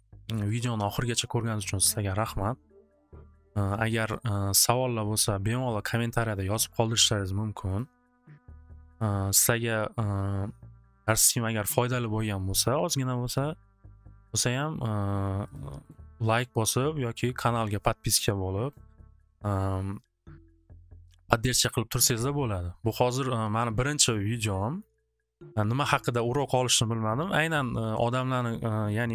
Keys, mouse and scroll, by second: 0.8 click, 2.3 click, 3.3 click, 4.1 click, 7.2 click, 7.7 click, 8.4 click, 12.8 click, 13.2 click, 15.5 click, 15.8 click, 23.1 click, 23.6 click, 24.1 click, 24.5 click, 24.8 click, 27.6 click.